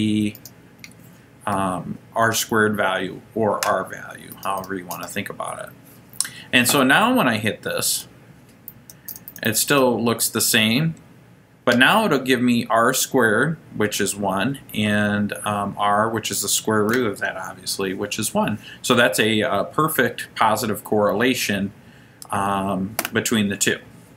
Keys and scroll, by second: 0.5 Right, 4.4 Down, 4.7 Down, 5.1 Down, 8.1 Return, 8.9 Return, 9.2 Return, 9.4 Return, 9.6 Return, 12.1 Return.